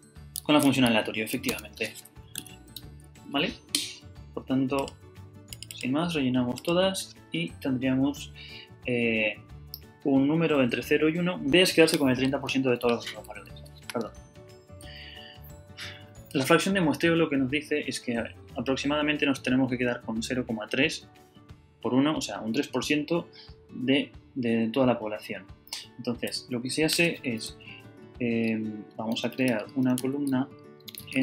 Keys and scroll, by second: 0.6 a, 1.5 Tab, 2.8 Return, 13.6 Up, 26.4 Down, 29.1-31.2 typing.